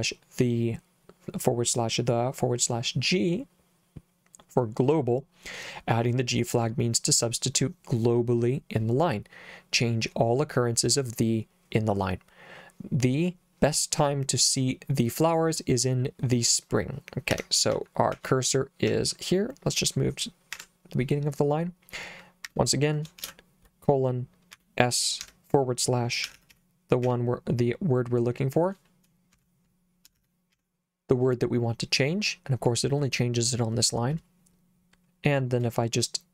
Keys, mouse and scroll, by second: 17.4 Escape, 17.7 j, 18.2 k, 18.9 h, 20.5 0, 22.5 Escape, 23.2 shift+;, 24.6-27.6 typing, 29.4-31.0 typing.